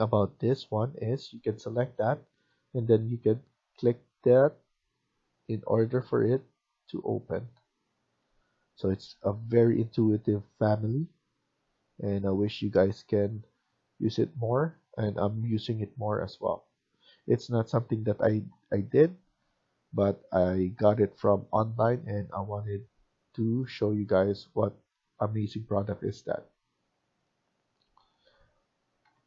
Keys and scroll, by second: 7.8 Escape, 8.1 Escape, 11.6 Escape, 26.4 Escape, 26.6 Escape, 28.9 Right.